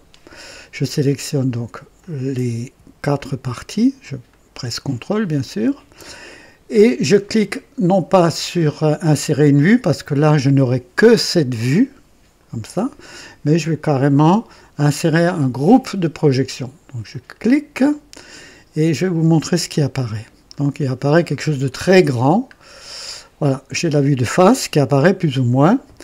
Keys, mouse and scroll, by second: 1.9 click, 3.1 ctrl+click, 4.2 ctrl+click, 5.3 ctrl+click, 17.0 click, 19.6 click, 20.3-22.2 scroll down 7, 22.6 scroll down 1.